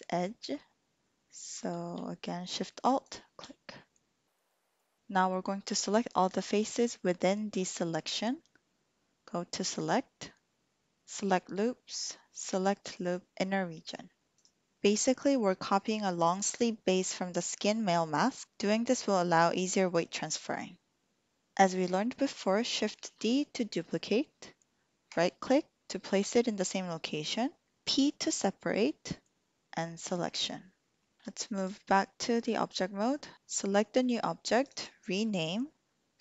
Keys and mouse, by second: 3.8 click, 4.5 click, 9.7-14.4 drag, 23.0 shift+d, 25.2 click, 31.2 Tab, 34.5 click, 34.8-36.2 drag.